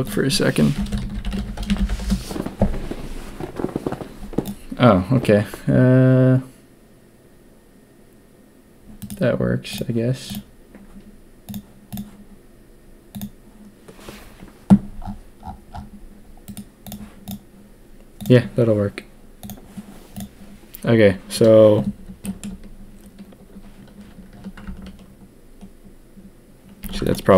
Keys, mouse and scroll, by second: 22.2 shift+middle click, 26.8 ctrl+a.